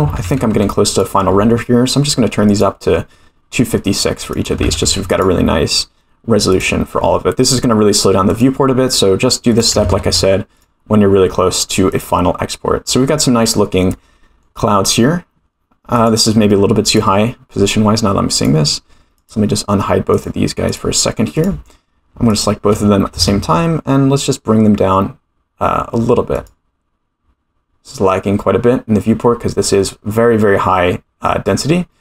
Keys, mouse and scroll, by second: 2.5 click, 4.3-6.2 drag, 6.5 click, 8.3 click, 9.5-10.9 drag, 11.9 click, 13.9 middle click, 15.9 click, 16.8 click, 17.4-18.4 scroll down 3, 18.4 click, 19.1 click, 20.1 click, 20.7 click, 21.3 click, 22.3 shift+click, 23.1 g.